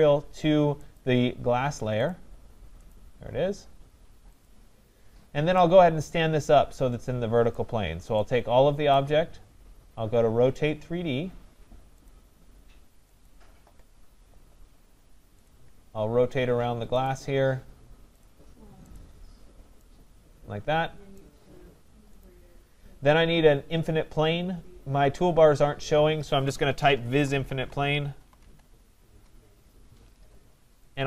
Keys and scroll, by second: 29.0 Return.